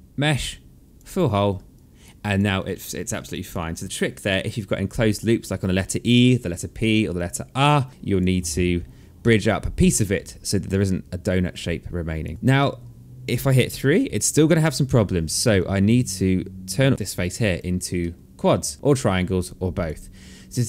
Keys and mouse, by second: 1.3 alt+click, 2.1 alt+click, 2.9 alt+click, 3.9 alt+click, 5.3 alt+middle click, 6.7 alt+click, 8.8 alt+middle click, 11.1 alt+click, 12.3 alt+middle click, 13.1 3, 14.3 1, 15.1 alt+click, 16.9 alt+middle click, 17.1 alt+click, 17.5 alt+middle click, 18.4 alt+click.